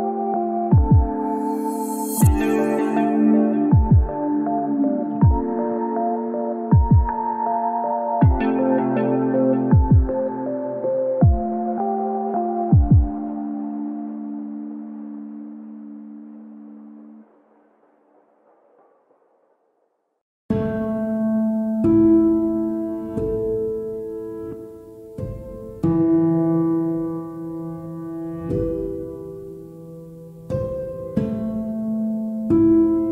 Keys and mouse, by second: 3.9-5.3 right drag, 12.3 ctrl+p, 13.9-21.2 right drag, 21.7 ctrl+z, 22.1 ctrl+z, 24.4 ctrl+shift+z, 25.2-27.6 right drag, 31.5 g, 31.7 z, 32.6 Escape, 32.9 Escape.